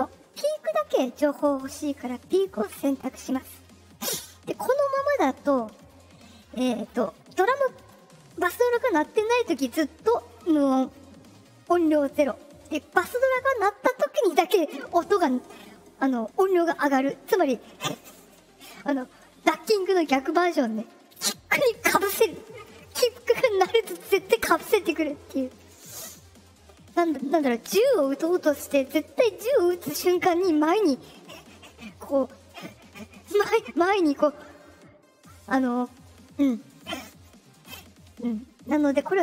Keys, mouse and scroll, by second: 2.6 click, 38.6 click.